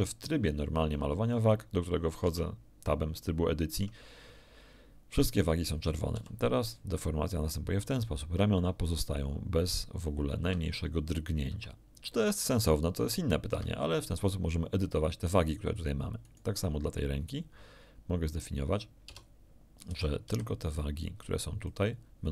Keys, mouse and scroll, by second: 2.3 Tab, 3.7 Tab, 6.1 r, 10.4 Escape, 11.5 r, 13.5 Escape, 16.2 click, 19.0 Tab, 19.8 a, 20.2 b, 21.0 click.